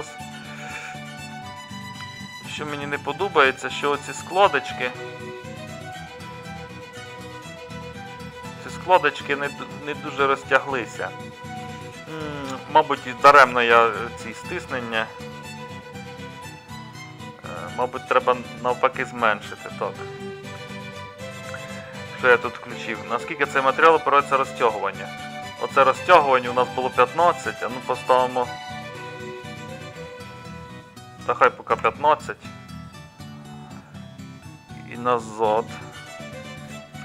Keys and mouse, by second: 0.0 middle click, 0.7-3.3 middle drag, 9.4-34.9 middle drag, 36.1 middle click.